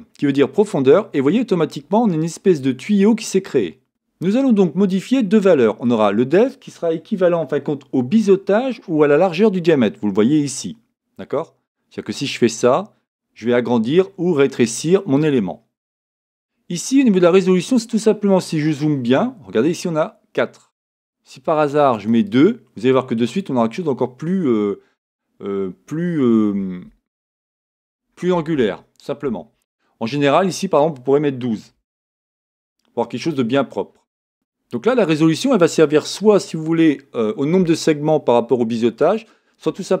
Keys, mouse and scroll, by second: 2.3 click, 2.4-12.5 middle drag, 12.5-40.0 drag.